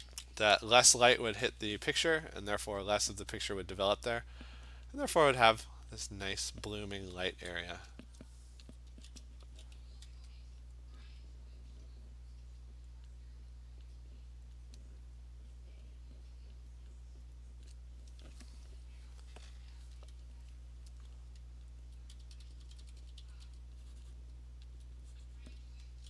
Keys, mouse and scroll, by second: 1.0 ), 2.7 ], 4.9 click, 6.0 click, 7.0 [, 7.3 [, 8.7 alt+click, 8.9 [, 9.5 [, 10.2 [, 11.0 click, 13.1 click, 13.9 click, 14.6 click, 16.9 click, 17.7 click, 21.9 alt+click, 22.3 alt+click, 22.3-23.5 typing, 24.2 click, 24.8 alt+click, 25.2 click, 25.4 click, 25.5 alt+click, 25.6 ].